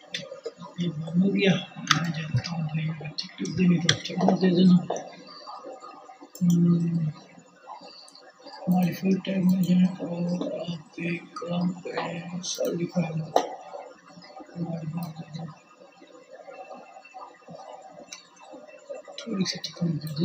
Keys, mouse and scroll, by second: 1.6 Tab, 6.4 middle click, 7.1-20.2 drag.